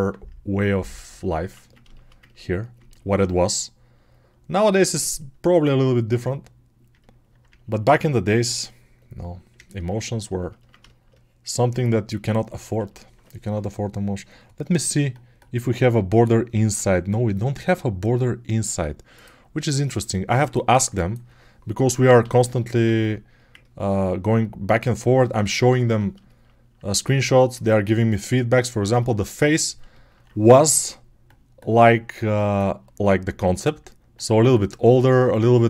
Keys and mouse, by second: 5.2-12.3 drag, 12.3 ctrl+alt+right click, 20.5-27.0 alt+right drag, 22.1 g, 27.0-35.6 alt+drag.